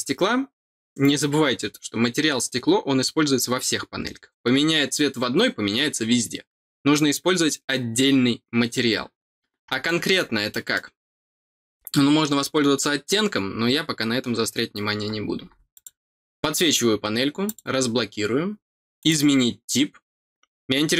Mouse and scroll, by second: 9.8 middle click, 10.4 middle click, 15.7 click, 17.4 click, 18.9 click.